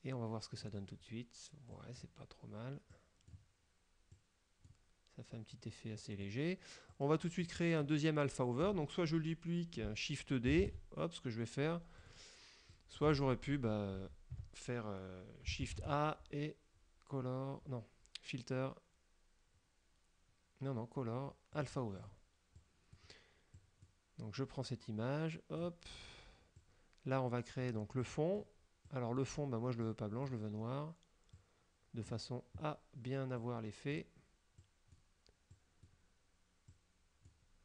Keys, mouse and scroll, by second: 1.9 click, 3.0 click, 4.2 click, 6.1 click, 7.0 click, 10.7 shift+d, 12.1 click, 12.7 click, 13.2 ctrl+z, 15.8 shift+a, 21.7 click, 22.1 click, 22.7 click, 23.6 click, 24.7-25.9 drag, 26.7-28.0 drag, 28.1 click, 29.0 click, 29.9 click, 31.5 click, 33.5 click, 34.7 click, 35.6 click, 36.8 click.